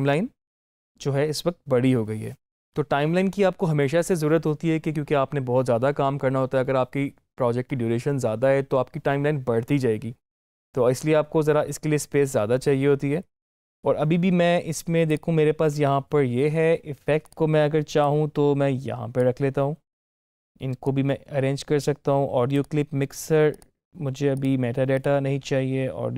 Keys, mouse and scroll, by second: 15.0-26.1 drag.